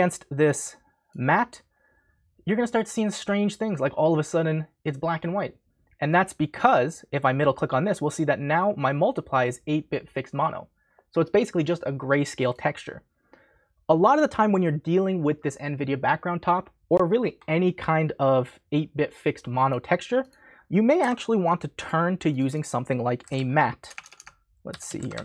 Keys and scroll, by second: 21.0 Delete, 23.0-25.2 typing.